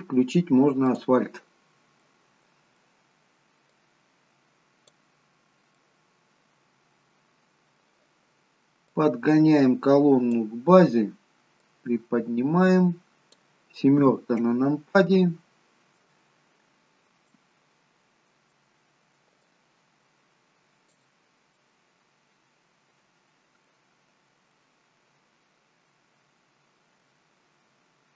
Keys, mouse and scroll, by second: 1.0 click, 1.8-2.2 scroll down 3, 2.2 middle click, 3.8 click, 5.9 middle click, 11.9 click, 14.2 KP_7, 15.4-15.8 scroll down 4, 16.9-17.6 scroll up 5, 17.6 shift+middle click, 19.6 click, 21.7 middle click, 24.6 middle click.